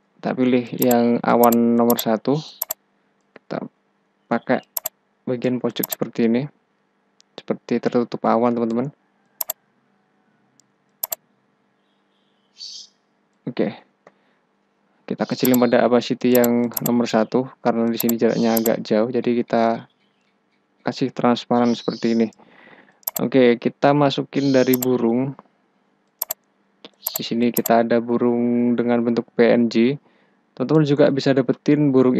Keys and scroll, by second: 3.5 ctrl+t, 13.7 Return, 14.7 Return.